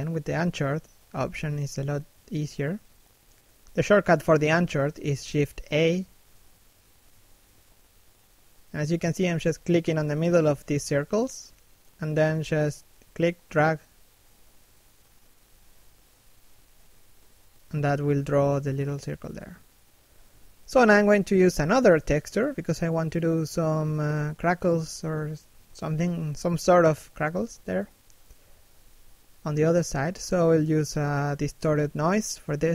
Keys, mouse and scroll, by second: 1.5 click, 2.4 scroll down 1, 2.6 middle click, 3.9 shift+middle click, 4.0 middle click, 4.4 shift+middle click, 4.7 scroll up 1, 5.3 click, 6.4 click, 7.7 shift+middle click, 8.0 middle click, 8.4 shift+middle click, 8.6 middle click, 9.1 click, 10.2 scroll down 1, 10.4 middle click, 10.7 shift+middle click, 10.9 middle click, 11.2 scroll up 1, 11.7 click, 12.6 scroll down 1, 12.8 middle click, 15.1 scroll down 1, 15.4 shift+middle click, 15.7 middle click, 16.4 shift+middle click, 20.1 middle click, 32.6 f.